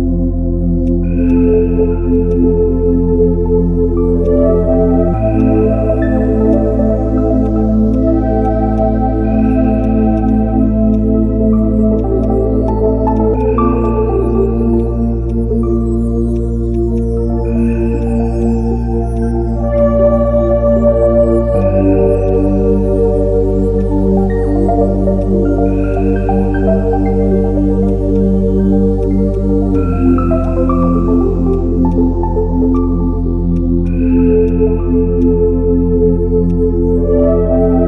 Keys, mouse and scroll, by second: 10.2 right click, 24.8 x.